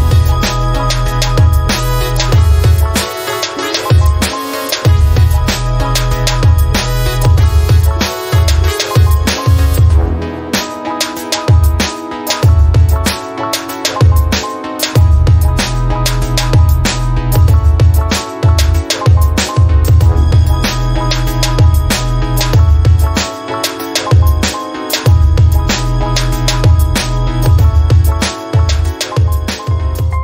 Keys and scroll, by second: 0.0-0.4 typing, 5.6-6.6 typing, 9.9-11.3 typing, 24.9 Tab, 27.7 ctrl+z, 28.1 ctrl+z.